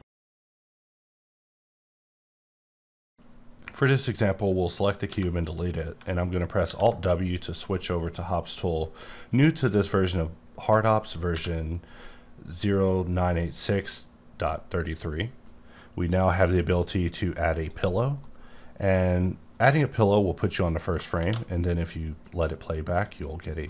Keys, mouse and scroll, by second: 5.1 x, 5.4 click, 6.6 alt+w, 11.3 q, 17.2 click, 18.2 middle click, 21.1 shift+space.